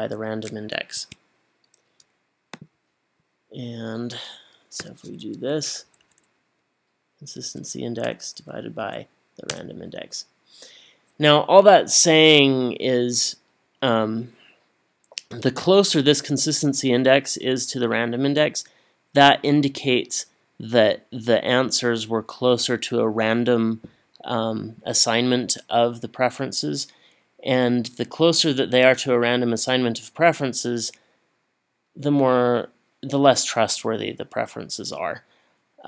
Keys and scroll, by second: 1.0 Escape, 4.8 =, 5.9 Up, 6.0 Up, 8.1 /, 8.8 Up, 9.6 Return.